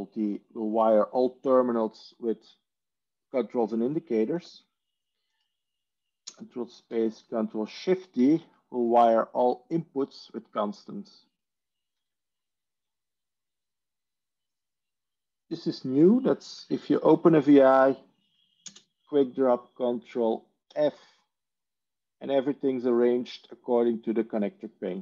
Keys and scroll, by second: 4.2 ctrl+z, 6.1 ctrl+space, 8.1 ctrl+shift+d, 11.8 ctrl+z, 18.8 ctrl+space, 20.8 ctrl+f.